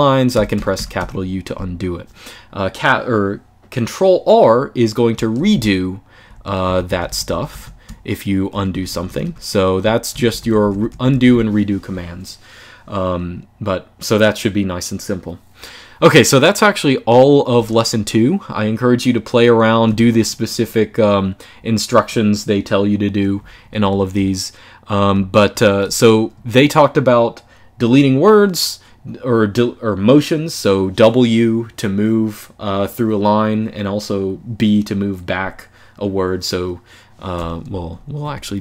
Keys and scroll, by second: 0.0-1.2 typing, 6.4 ctrl+r, 6.8 ctrl+r, 7.0 ctrl+r, 7.2 ctrl+r, 8.2-8.9 typing, 9.8 ctrl+r, 10.0 ctrl+r, 10.4 ctrl+r, 17.3 j, 22.9-26.1 typing, 37.7-38.6 typing.